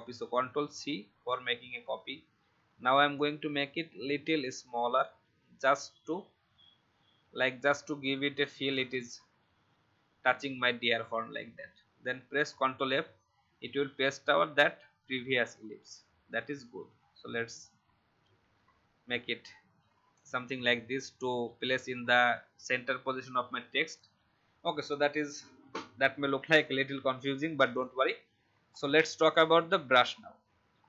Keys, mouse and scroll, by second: 0.4 ctrl+c, 3.1-9.2 alt+shift+drag, 12.7 ctrl+f, 16.3-20.4 alt+shift+drag, 25.5 alt+scroll up 1, 26.5 click, 28.7-29.2 alt+scroll down 1, 29.2 click, 30.7-30.8 alt+scroll down 1.